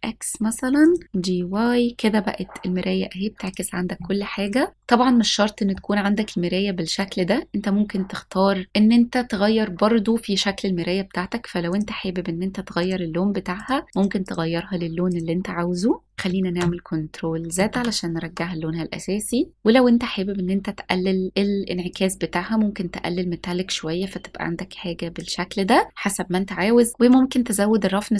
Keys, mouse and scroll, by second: 0.9 click, 1.0 g, 1.0 y, 3.5-4.6 drag, 4.7-5.8 middle drag, 7.0 click, 11.8 click, 15.1 click, 17.1 ctrl+z, 17.8 ctrl+z, 19.7-21.8 scroll down 1, 22.0-25.3 drag, 26.5 scroll down 1, 26.9-28.1 drag.